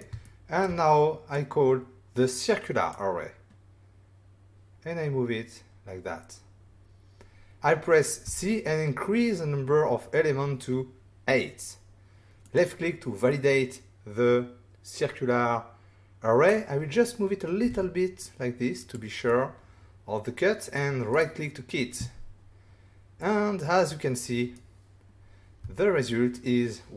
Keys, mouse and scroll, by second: 0.2 ctrl+middle click, 1.3 click, 8.2 c, 12.4 click, 13.2 middle click, 17.6 typing, 18.8 click, 19.2 middle click, 21.1 right click, 23.2 middle click, 25.6 <, 26.1 middle click.